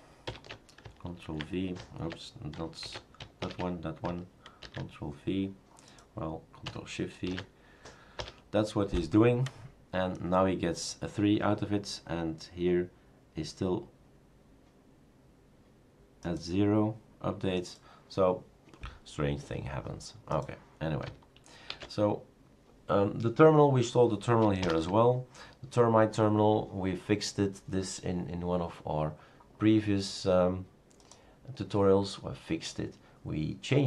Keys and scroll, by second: 0.2 shift+super+Return, 7.3 ctrl+shift+v, 8.2 Return, 21.8 shift+super+q, 24.6 super+Return.